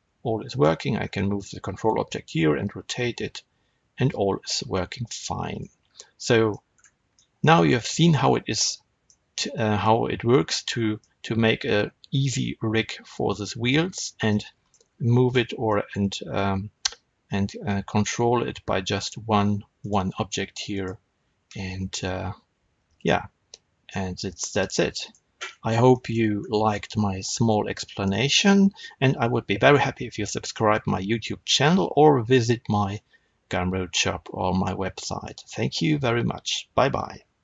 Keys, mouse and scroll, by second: 0.5 click, 0.8 scroll down 2, 1.1-5.8 shift+middle drag, 2.0 r, 5.5 right click, 5.8-6.1 scroll up 2, 6.1-17.9 middle drag, 6.6-7.1 scroll up 2, 7.6 scroll up 2, 13.9 scroll down 2, 14.1 scroll up 2, 14.7-15.3 scroll down 2, 15.3 scroll down 1, 17.9 click, 19.7 click, 20.6 click, 21.6 r, 25.0 right click, 25.4-25.8 scroll up 1, 25.8-37.4 shift+middle drag, 26.3-26.6 scroll up 1, 28.0 shift+scroll up 1.